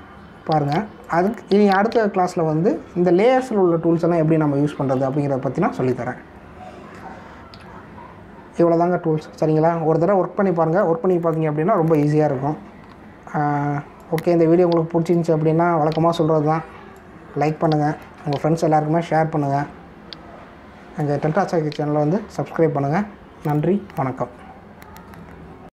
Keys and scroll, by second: 8.5 v.